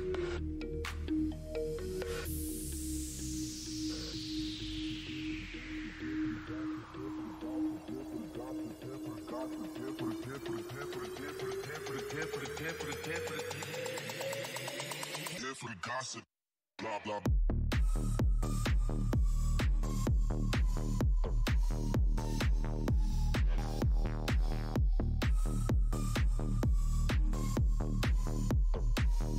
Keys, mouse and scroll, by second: 1.7 click, 2.7 right click, 2.9 Tab, 3.2 click, 3.3 Tab, 3.4 right click, 3.6 right click, 4.2 e, 4.7 right click, 4.8 right click, 6.9 right click, 7.2 right click, 7.3-8.5 typing, 8.3 right click, 8.5 right click, 9.0 right click, 9.6 Tab, 11.4 click, 14.1 click, 15.5 Tab, 15.5 right click, 15.6 right click, 16.3 right click, 16.5 w, 16.8 e, 17.0 right click, 17.5 Tab, 17.9 click, 21.9 Tab, 21.9 click, 26.3 Tab, 27.5 scroll down 1, 28.3 Tab, 28.5 alt+click, 29.0 Tab.